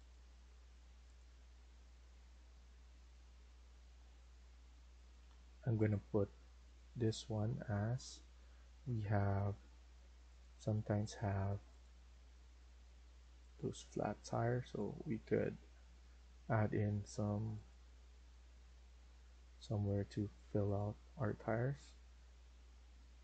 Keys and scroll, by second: 9.8 Escape, 15.0 Escape.